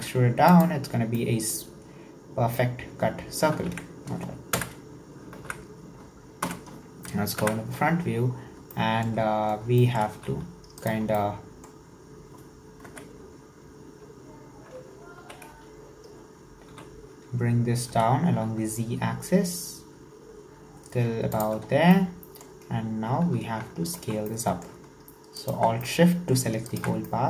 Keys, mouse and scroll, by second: 1.2-3.6 middle drag, 3.6 ctrl+z, 4.5 KP_1, 5.4 alt+z, 6.5 /, 7.4 KP_1, 8.0-8.6 scroll up 9, 8.8 shift+middle click, 9.6-9.9 scroll down 1, 9.9 shift+middle click, 10.2 s, 11.1 scroll down 1, 11.1-12.9 middle drag, 12.9 KP_1, 13.8-15.2 scroll up 1, 15.2 w, 16.7 e, 21.7-22.0 scroll down 4, 22.0-23.0 middle drag, 23.0 scroll up 1, 23.3 alt+z, 23.8 alt+shift+right click, 24.3-25.4 middle drag, 25.4 alt+shift+right click, 25.9 middle click, 26.7 alt+shift+right click, 27.1 middle click.